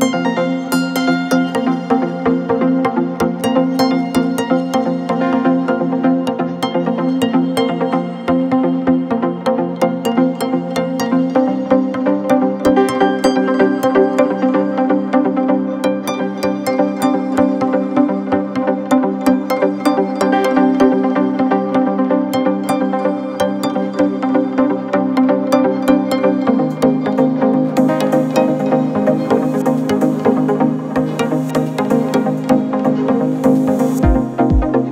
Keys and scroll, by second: 12.8 ], 14.3 ], 15.4 4, 19.9 ], 23.9 ctrl+z, 24.4 ], 28.9 Delete, 30.0 ], 30.4 \, 30.8 ], 31.2 ], 33.3 4.